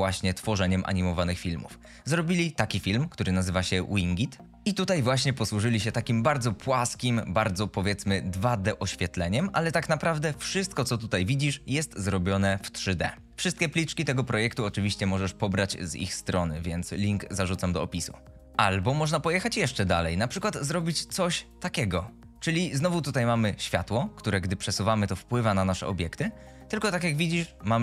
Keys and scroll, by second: 24.3 g.